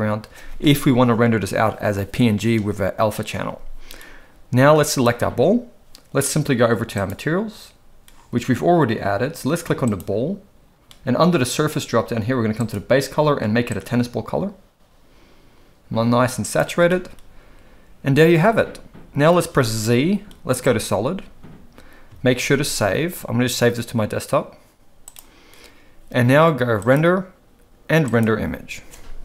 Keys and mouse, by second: 4.9 click, 9.8 click, 12.6 click, 19.5 z, 22.4 ctrl+s, 26.9-29.2 drag.